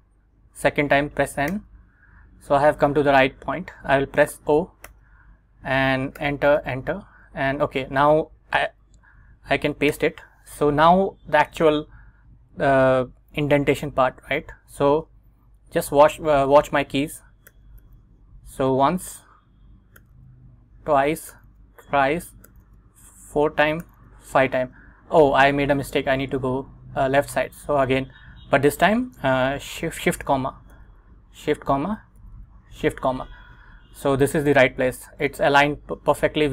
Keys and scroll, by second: 1.6 n, 5.0 o, 6.3 Return, 7.4 Up, 10.0 super+v, 12.4 Escape, 17.6 shift+., 20.1 shift+., 30.8 shift+'.